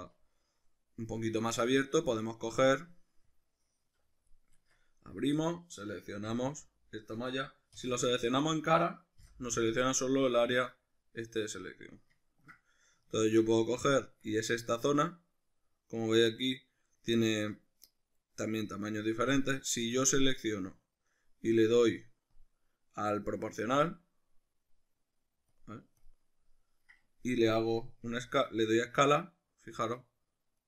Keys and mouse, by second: 1.4-3.3 ctrl+middle drag, 3.3-5.4 drag, 4.6 Tab, 5.4 right click, 6.3 l, 7.8 3, 8.4 right click, 9.2 l, 10.0-19.7 middle drag, 19.7 right click, 20.4 right click, 22.4 click, 23.8 click, 28.2 s.